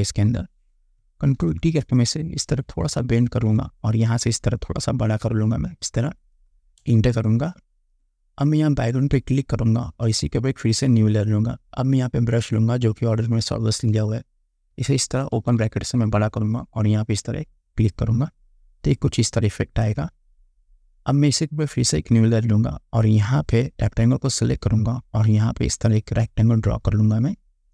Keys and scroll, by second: 1.5 ctrl+t, 6.9 Return, 14.0 ].